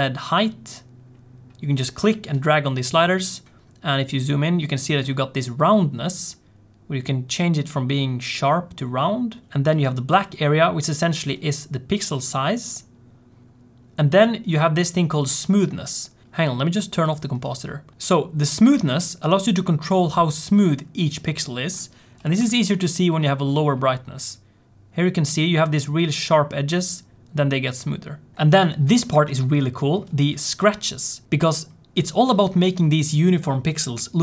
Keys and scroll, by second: 16.3 z.